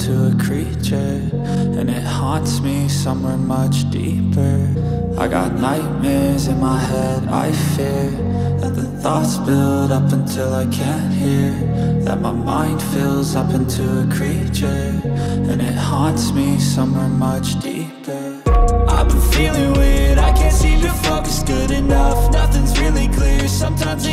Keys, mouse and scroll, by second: 0.0 double click, 0.9 ctrl+alt+z, 1.3 ctrl+alt+z, 1.7 ctrl+alt+z, 2.1 right click, 5.6 double click, 6.6 ctrl+alt+z, 6.9 ctrl+alt+z, 7.1 ctrl+alt+z, 7.4 ctrl+alt+z, 7.8 ctrl+alt+z, 8.2 ctrl+alt+right click, 13.4 ctrl+alt+z, 13.8 ctrl+alt+z, 14.0 ctrl+alt+right click, 14.7 double click, 21.9 alt+space, 22.0 alt+click, 22.6 ctrl+click.